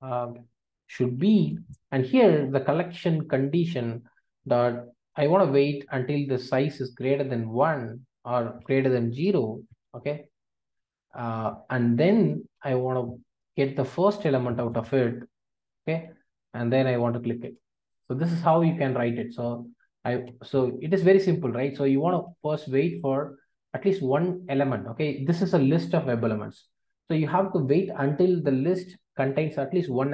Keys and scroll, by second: 5.2 Return, 14.6 Return, 17.4 Return.